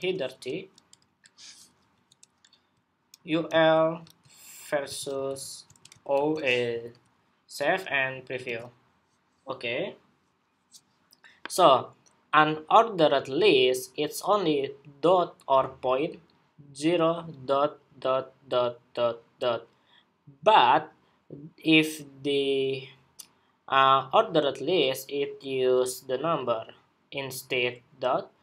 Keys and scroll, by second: 6.5 super+s, 8.2 super+r.